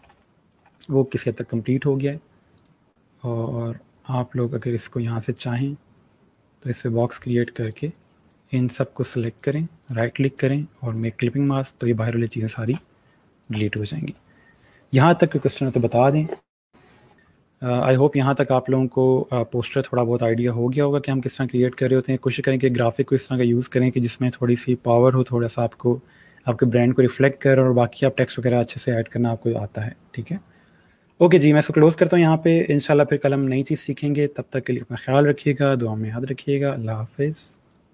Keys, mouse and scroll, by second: 0.3 space, 0.3 click, 0.8 space, 2.7 right click, 3.5 click, 9.8 click, 10.0 right click, 11.1 click, 12.2-12.8 alt+scroll up 2, 12.8 space, 12.9 click, 13.3 space, 13.8 click, 17.1 space.